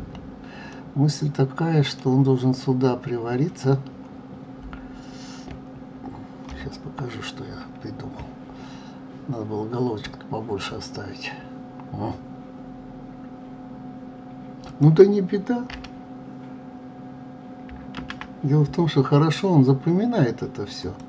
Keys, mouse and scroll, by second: 0.7-3.8 middle drag, 4.4-6.5 scroll down 2, 6.5 KP_3, 7.4-7.9 scroll up 4, 14.6 click, 15.7 Delete, 17.9 shift+a.